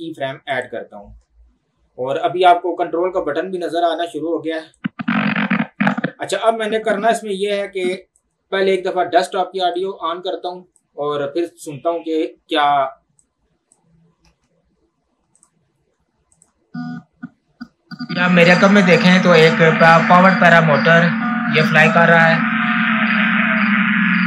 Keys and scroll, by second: 14.2 space.